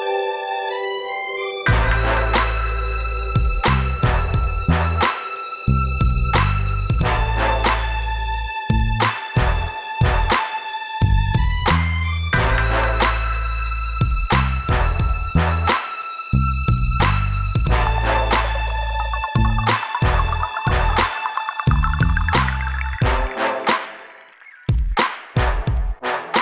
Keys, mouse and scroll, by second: 2.0 click, 3.0 click, 4.5 scroll down 2, 6.3 click, 6.5 click, 6.9 click, 7.0 click, 8.0 l, 11.0 scroll up 2, 15.7 click, 15.9 click, 16.3 click, 16.4 click, 17.4 click, 21.4 click, 21.5 click, 23.0 click, 23.0 click, 24.1 click, 24.2 click, 24.8 f, 26.0 middle click.